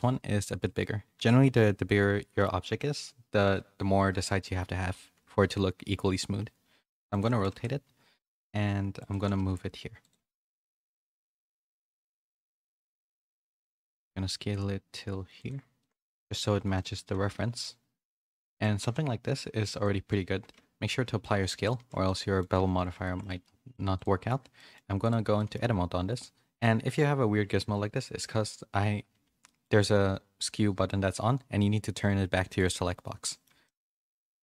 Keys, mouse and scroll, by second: 7.4 s, 9.1 g, 10.2 s, 10.3 y, 11.5 s, 13.5 g, 16.2 z, 16.7 shift+middle click, 17.2 s, 18.6 g, 20.8 ctrl+a, 21.7 z, 22.0 middle click, 22.5 a, 22.7 a, 23.0 shift+middle click, 23.4 middle click, 23.9 click, 24.3 Tab, 24.5 middle click, 25.3 middle click, 29.4 middle click, 32.5 click, 33.2 middle click, 33.6 shift+middle click.